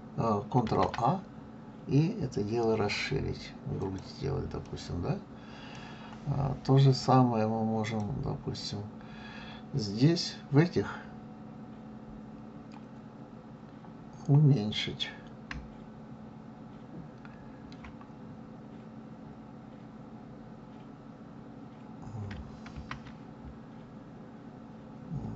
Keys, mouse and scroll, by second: 0.6 ctrl+a, 4.6-7.6 middle drag, 7.8 click, 22.8 ctrl+a.